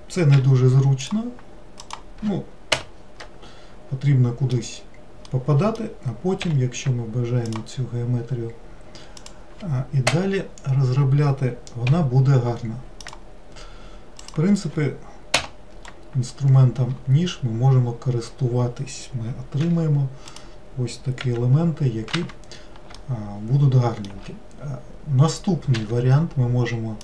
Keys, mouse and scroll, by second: 0.4 k, 3.2-6.5 middle drag, 6.5 k, 11.9 k, 15.8-16.9 scroll up 3, 16.9-17.7 scroll up 5, 17.9 scroll down 2, 18.5 scroll down 5, 19.6 3, 20.4 click, 21.3 e, 23.0-24.7 shift+middle drag, 24.7-25.8 scroll down 1, 25.8 1.